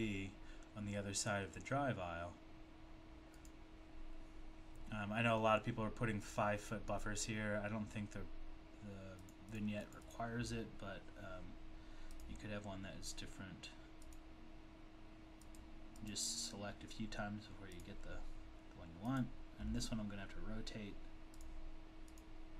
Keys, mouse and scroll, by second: 3.4 click, 4.3-6.7 scroll down 2, 9.3 click, 9.5 click, 10.1 double click, 12.2 click, 14.1 click, 15.5 click, 17.7 click, 22.1 click, 22.2 click.